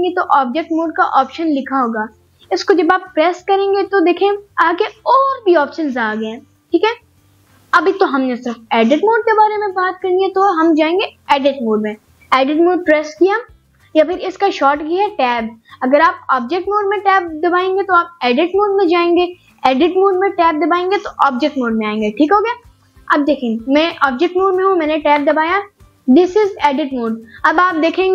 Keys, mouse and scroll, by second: 21.2 right click, 24.5 Tab, 27.8 Tab.